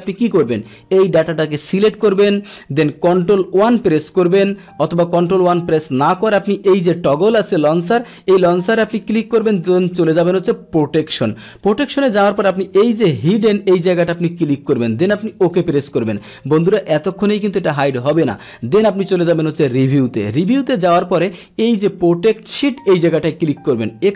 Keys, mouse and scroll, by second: 0.6-2.1 drag, 3.6 ctrl+1, 5.3 click, 7.8 click, 9.0-9.5 drag, 11.1 click, 13.3 click, 15.4 click, 19.8 click, 23.0 click.